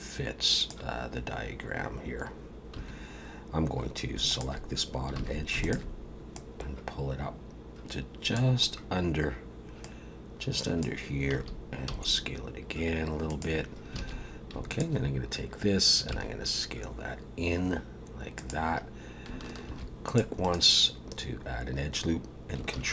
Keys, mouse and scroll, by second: 2.7 2, 4.3 alt+shift+click, 5.2 alt+a, 5.6 alt+shift+click, 6.3 click, 8.6 scroll up 3, 9.8 click, 11.3 a, 11.9 s, 13.9 alt+a, 14.7 alt+shift+click, 16.1 s, 19.6 ctrl+r, 22.7 ctrl+b.